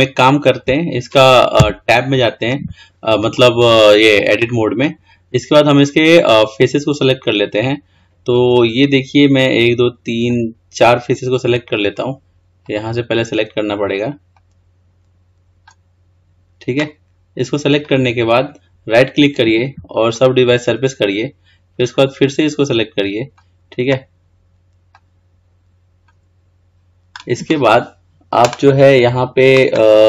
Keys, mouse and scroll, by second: 0.1-1.9 shift+middle drag, 1.9 Tab, 5.5-8.5 scroll up 1, 8.8 click, 13.4 click, 14.6 click, 20.5-22.3 right drag, 22.3 click, 25.2 click.